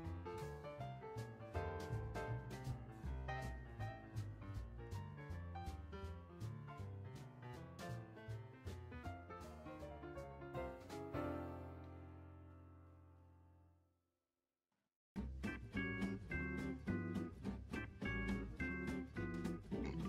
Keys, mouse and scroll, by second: 0.3-3.3 drag, 5.3 click, 5.8 click, 6.1 click, 6.5 space, 8.0 space, 9.1-12.1 drag, 12.4 ctrl+z, 12.8 ctrl+z, 13.1 ctrl+z, 13.4 ctrl+z, 14.2 ctrl+z, 14.6 ctrl+z, 15.9-16.3 scroll down 3, 18.1 click, 18.6-19.2 scroll up 9, 19.2-19.6 middle drag, 19.7-20.0 scroll up 15.